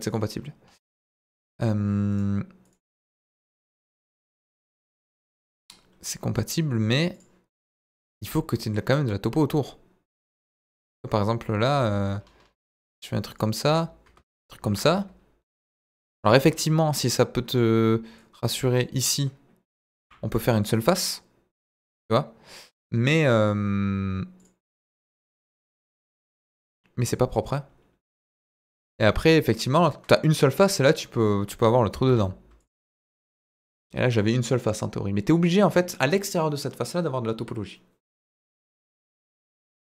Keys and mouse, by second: 1.2 Tab, 2.2 right click, 2.8 right click, 3.8 right click, 4.7 right click, 7.2 click, 7.8 click, 11.7 ctrl+r, 13.6 Escape, 14.6 ctrl+r, 16.2 Escape, 17.5 click, 18.2 click, 20.0 f, 20.8 click, 21.6 click, 24.3 click, 25.7 click, 26.7 click, 28.1 click, 31.1 middle click, 32.0 x, 32.9 middle click.